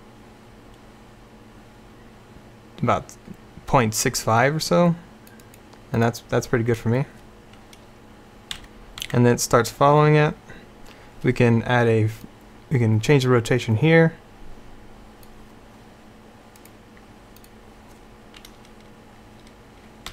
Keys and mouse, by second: 8.6 Right, 9.1 Right.